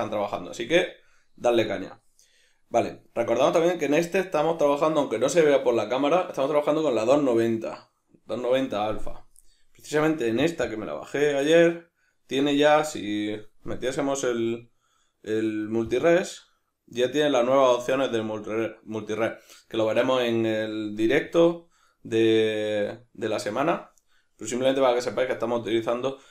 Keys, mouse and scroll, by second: 1.6 right click, 10.7-16.4 drag, 16.4-21.3 middle drag, 21.3-21.9 drag, 21.9-26.3 middle drag.